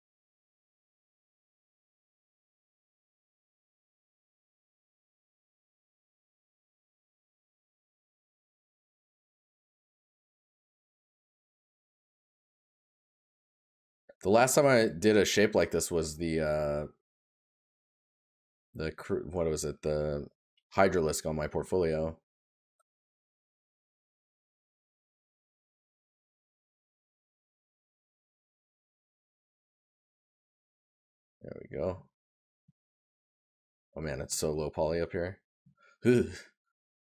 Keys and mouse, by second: 26.3 right click, 32.1 right click.